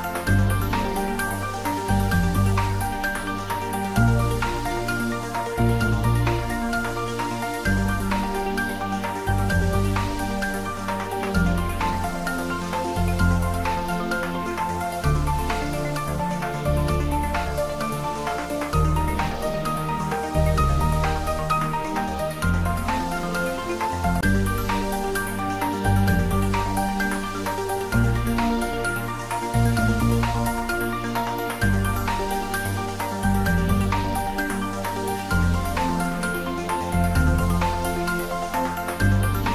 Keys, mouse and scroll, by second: 0.0 a, 6.9 r, 8.3-9.9 typing, 13.3 click, 16.0 click, 16.1 r, 17.4-18.3 typing, 22.2 click, 25.3 s, 26.6 y, 30.1-31.3 typing, 30.4 click.